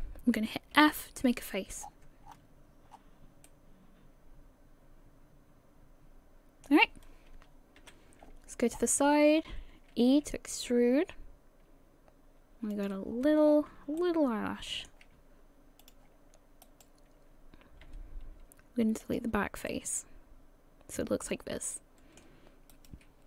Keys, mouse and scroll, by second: 2.3 scroll down 10, 2.3 f, 2.9-3.5 scroll down 3, 3.5 middle click, 3.5 scroll down 2, 7.8 KP_3, 8.7-10.2 scroll up 14, 10.2 e, 13.1 scroll down 5, 13.5 scroll up 4, 14.0 middle click, 15.8 click, 16.6 right click, 17.9 x, 19.7 middle click, 22.7 right click.